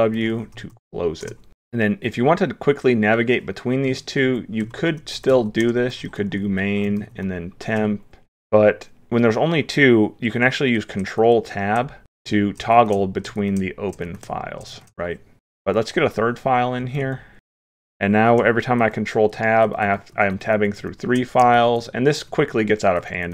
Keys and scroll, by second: 0.2 ctrl+p, 3.9 ctrl+p, 6.3 ctrl+p, 11.2 ctrl+Tab, 12.1 ctrl+Tab, 12.8 ctrl+Tab, 15.7 ctrl+p, 18.8 ctrl+Tab, 19.3 ctrl+Tab, 19.7 ctrl+Tab.